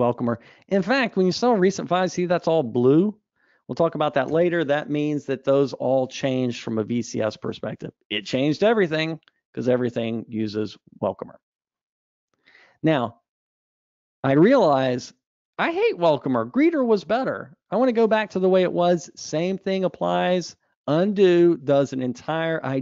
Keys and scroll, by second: 1.8 super+e, 20.5 super+z.